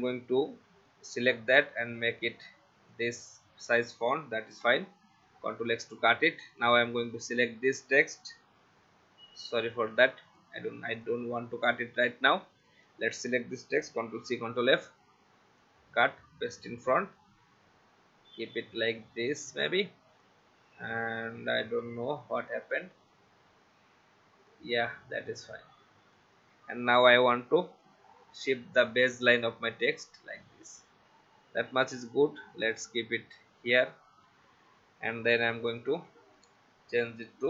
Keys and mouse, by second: 1.4 v, 2.9 click, 4.5 ctrl+x, 6.5 click, 9.7 ctrl+z, 11.0 click, 12.6 click, 13.9 ctrl+c, 14.2 ctrl+f, 15.6 click, 21.6 Right, 21.8 Left, 24.5 click, 35.2 t, 35.5 click.